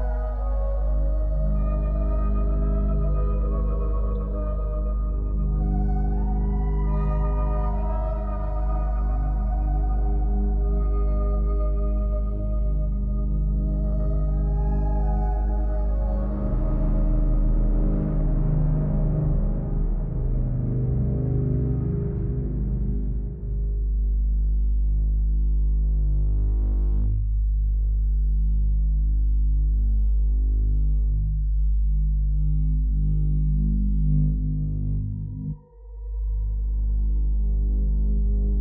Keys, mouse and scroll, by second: 1.1 click, 2.9 click, 11.7 click, 14.1 click, 15.0 click, 16.7 click, 22.6 click, 23.5 click, 24.8 click, 25.7 click, 27.8 click, 29.4 click, 31.0 click, 32.7 click.